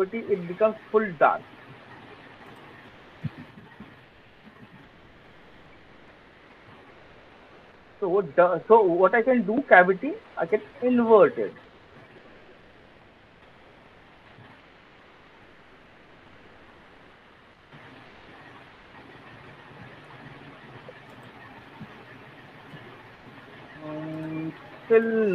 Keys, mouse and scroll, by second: 0.9 alt+middle click, 1.4 alt+middle click, 2.2 click, 7.8 click, 10.7 click, 19.9 click, 19.9 alt+right click.